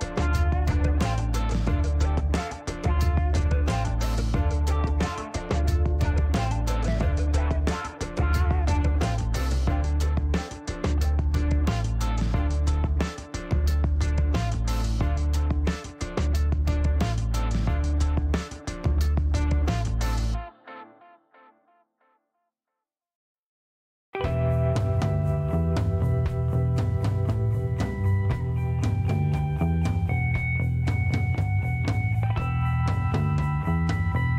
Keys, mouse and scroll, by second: 0.0-0.9 typing, 2.5 click, 3.6 click, 4.4 5, 4.8 Return, 6.3 click, 7.9 click, 8.8 middle click, 11.9 click, 13.1 click, 14.7 click, 15.2 right click, 15.8 click, 17.2 click, 17.9-18.8 typing, 19.2 middle click, 20.2 click, 23.3 click, 24.3 Delete, 25.8 click, 27.5 click, 28.3 click, 30.4 click, 31.3 click, 32.9 click.